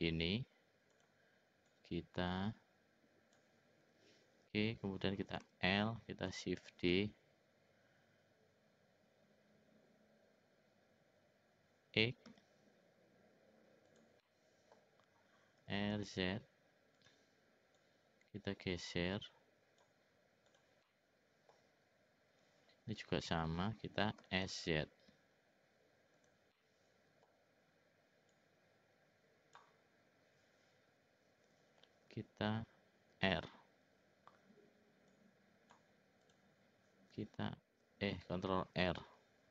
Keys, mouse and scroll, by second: 0.9 click, 1.6-3.4 drag, 5.4 l, 6.7 shift+d, 14.2 middle click, 15.6 r, 17.8-19.9 drag, 20.8 middle click, 23.0 l, 24.2 s, 26.5 middle click, 28.3-29.6 drag, 33.1 shift+r, 35.0 click, 36.2 click, 38.6 ctrl+r.